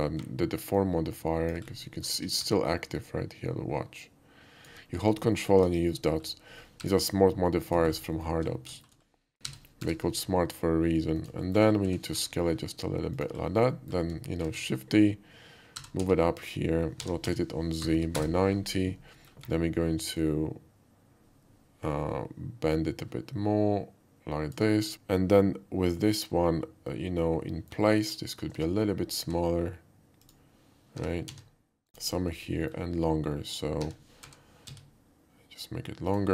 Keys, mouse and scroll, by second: 0.8-1.5 ctrl+drag, 1.8 ctrl+middle drag, 2.2 KP_5, 3.0-4.7 drag, 5.0 ctrl+middle click, 5.2 alt+middle click, 5.4 alt+middle click, 5.6 KP_5, 6.1 middle click, 6.1 shift+KP_5, 6.8 g, 7.7 click, 7.9 middle click, 8.1 alt+middle click, 8.8 shift+middle drag, 9.4 g, 9.9 y, 10.0 g, 11.2 click, 11.5 middle click, 11.8 s, 12.2 y, 13.2 click, 13.7 middle click, 14.4 shift+d, 14.8 right click, 15.7 g, 16.0 z, 16.4 click, 17.0 r, 17.3 z, 17.8 9, 18.0 0, 18.1 Return, 19.2 middle click, 20.2-24.6 ctrl+drag, 24.9 ctrl+z, 27.5 middle click, 28.6 Tab, 29.2 s, 30.2 click, 31.0 g, 31.3 z, 31.9 click, 33.8 s, 34.3 y, 34.7 x, 36.1 click.